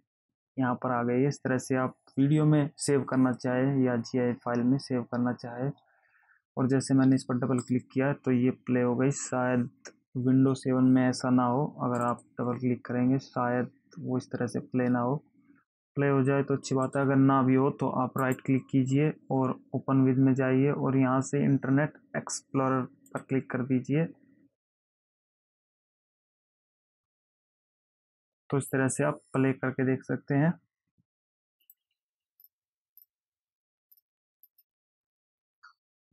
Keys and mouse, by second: 8.0 click, 12.3 click, 17.2 click, 18.6 right click, 23.4 click, 24.6 click, 31.8 click, 32.6 click, 33.2 click, 34.2 click.